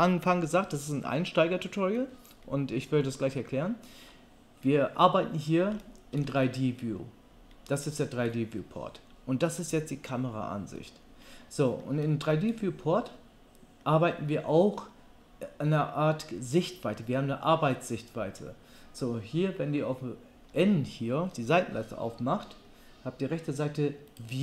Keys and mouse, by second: 21.7 n, 22.1 n, 24.1 click.